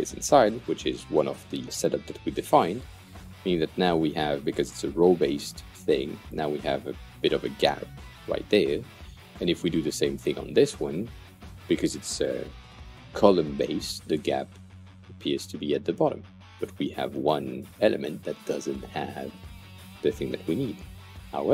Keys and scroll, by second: 11.0 Delete.